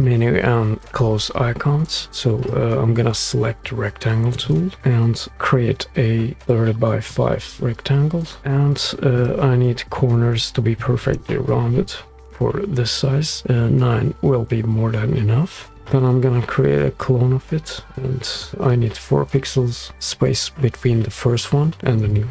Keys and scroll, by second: 2.1 r, 4.8 r, 8.1-8.9 typing, 11.3 Return.